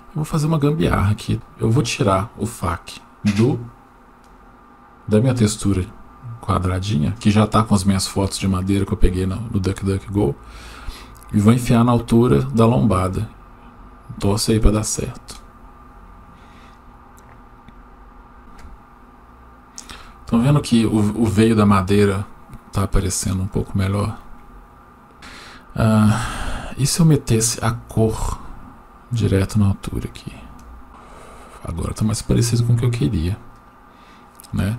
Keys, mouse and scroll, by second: 0.2 click, 0.8-1.3 drag, 4.2 click, 10.8-15.2 drag, 25.1 click, 28.1 click.